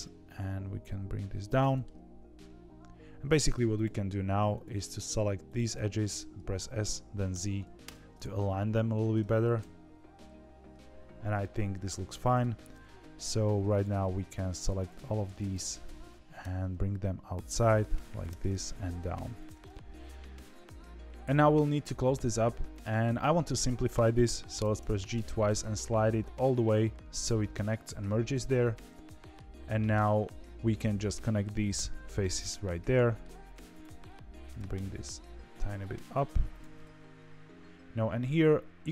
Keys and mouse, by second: 0.0 g, 1.6 middle click, 3.7 alt+click, 4.5 click, 6.5 s, 8.3 middle click, 9.5 KP_3, 12.6 middle click, 13.5 2, 13.7 click, 15.4 KP_3, 16.3 e, 18.2 e, 19.5-21.0 middle drag, 22.6 click, 23.0-24.1 middle drag, 24.6 g, 28.0-29.3 middle drag, 32.0-33.2 middle drag, 33.5 2, 34.0 middle click, 34.5 g, 36.7-38.2 middle drag, 38.8 middle click.